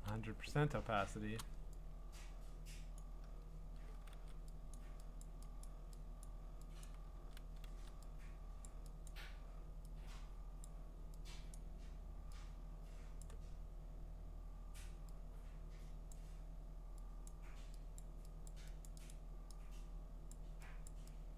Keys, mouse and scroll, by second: 0.0-1.4 typing, 3.0 click, 4.1 ctrl+z, 4.7 click, 5.2 click, 5.6 click, 6.2 click, 6.8 click, 7.2 ctrl+z, 7.7 ctrl+z, 8.6 click, 9.1 click, 10.6 click, 11.5 click, 13.2 click, 16.1 click, 17.3 click, 18.0 click, 18.5 click, 18.9 click, 19.1 click, 20.3 click, 20.9 click.